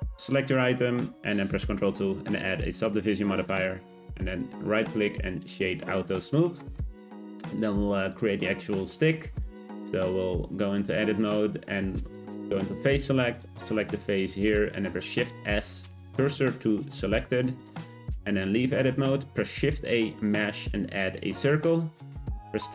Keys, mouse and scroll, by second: 1.6 ctrl+2, 2.6-3.5 middle drag, 3.5-5.5 right drag, 5.5 click, 5.9-6.3 scroll down 2, 6.3-9.9 middle drag, 9.9 Tab, 11.4 click, 11.9 3, 13.3 click, 13.8-14.8 middle drag, 14.8 shift+s, 17.1 Tab, 17.6 click, 18.8 shift+a, 21.1-22.6 scroll up 1, 22.6 Tab.